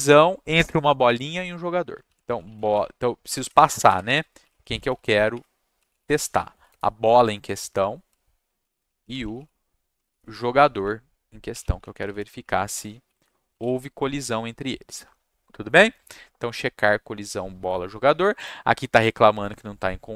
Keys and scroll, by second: 1.8-7.0 typing, 3.6 Caps_Lock, 8.3-13.2 typing, 13.5 ctrl+c.